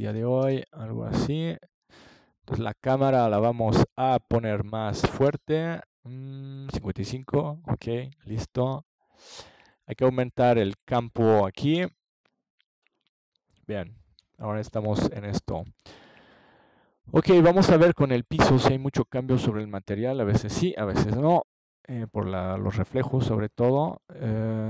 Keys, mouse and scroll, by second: 2.7 click, 4.2 KP_7, 6.2 g, 11.1 click, 11.9 KP_0, 13.5 click, 14.5 click, 21.0 ctrl+s.